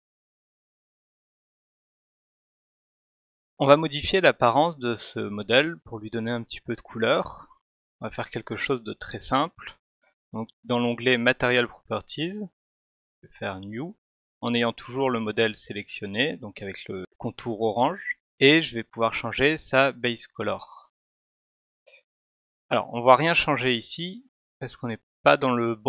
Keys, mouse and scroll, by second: 6.7 click, 13.2 click, 18.7 click, 20.2-22.1 drag.